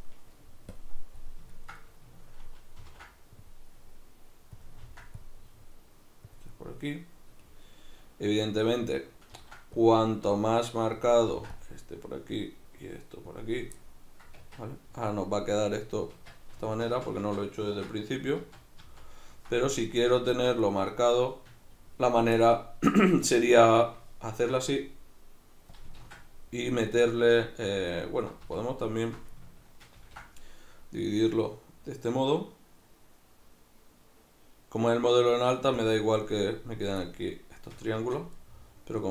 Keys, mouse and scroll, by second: 0.8 click, 1.2-17.3 middle drag, 2.8 ctrl+r, 4.6 click, 4.8 ctrl+r, 6.4 click, 9.3 ctrl+r, 11.1 click, 11.3 ctrl+r, 13.4 click, 14.4 Tab, 17.3 ctrl+z, 20.6 middle click, 24.3 ctrl+r, 25.8 click, 26.3 z, 27.0 middle click, 27.9 alt+right click, 28.6 alt+shift+right click, 28.9 alt+shift+right click, 30.0 ctrl+b, 35.9 click, 37.1-39.1 middle drag, 38.0 Tab.